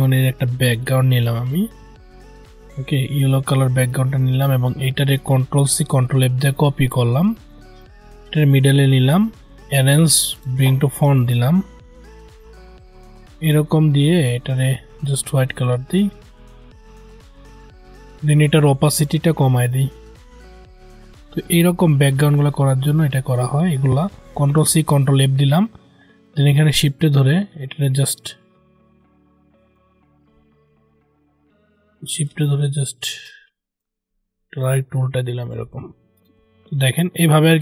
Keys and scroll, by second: 5.3 ctrl+c, 5.7 ctrl+f, 24.2 ctrl+c, 24.6 ctrl+f.